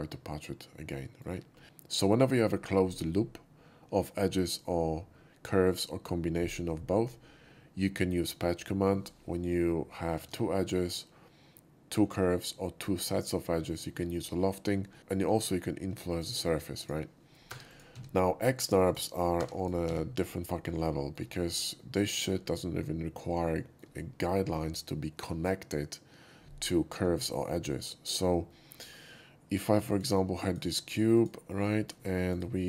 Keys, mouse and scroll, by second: 0.1-1.2 shift+middle drag, 10.0 shift+middle drag, 14.9 middle click, 16.1 click, 16.8 click, 17.5 3, 17.7 click, 18.1 x, 18.8 click, 19.3-20.3 typing, 19.6 click, 20.6 middle drag, 21.0 shift+middle click, 21.8 shift+middle click, 22.2 shift+middle click, 23.3 scroll up 1, 23.4-23.8 shift+middle drag, 27.6 alt+middle click, 28.1 alt+middle click, 28.5 shift+middle drag, 29.9 shift+click, 30.5 shift+drag, 31.1 shift+click, 31.7 middle drag, 32.0 shift+middle click, 32.3 shift+right click.